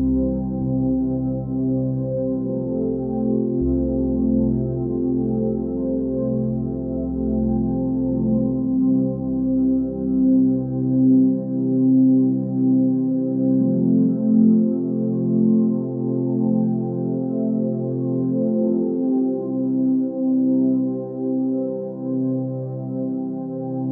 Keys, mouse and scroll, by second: 1.6 x, 7.7 ctrl+space, 9.6 click, 12.3 ctrl+space, 16.6 ctrl+space, 19.0 ctrl+space, 21.7 ctrl+space.